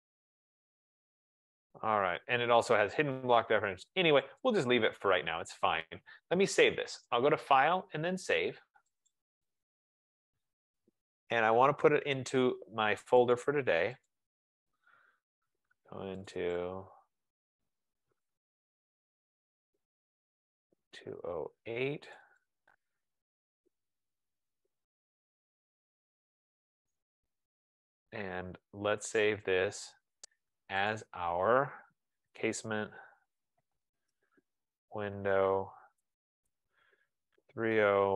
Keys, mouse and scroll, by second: 4.7 click, 8.0 click, 9.6 click, 14.1 click, 14.9 click, 17.5 click, 17.7 click, 19.2 click, 20.2 click, 22.4 click, 22.7 click, 23.8 click, 24.4-26.7 typing, 29.6 click, 29.7 click, 31.1 click, 32.3-34.2 typing, 35.5-38.1 typing.